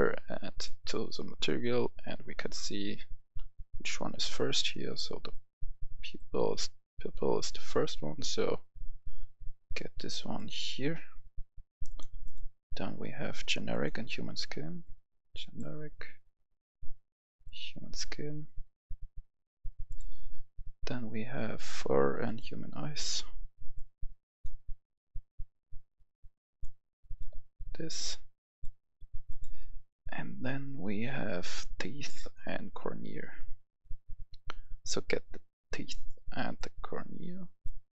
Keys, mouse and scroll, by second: 3.3-3.7 scroll down 1, 3.7 scroll up 2, 5.3-16.5 drag, 30.5-30.8 scroll down 1, 32.2-37.9 drag.